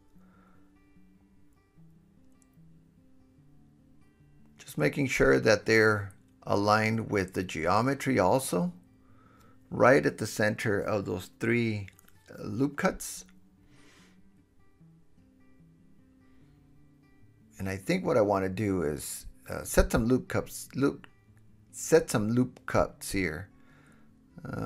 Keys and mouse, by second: 0.8 alt+z, 1.0 alt+z, 2.3 KP_7, 3.6 alt+h, 4.4 KP_1, 6.0 KP_1, 6.4 g, 6.6-8.7 drag, 7.0 KP_7, 9.2 g, 9.5 click, 10.2 g, 11.0-11.9 drag, 12.2 g, 12.6 click, 13.0 g, 13.7 click, 14.4 g, 14.7-15.2 drag, 15.5 g, 15.9 drag, 16.3 g, 16.7-17.2 drag, 17.3 g, 17.7-20.7 drag, 20.6 Tab, 20.9 click, 20.9 middle click, 20.9 right click, 21.0 Tab, 22.7 2, 23.4 super+b, 23.6-24.6 drag.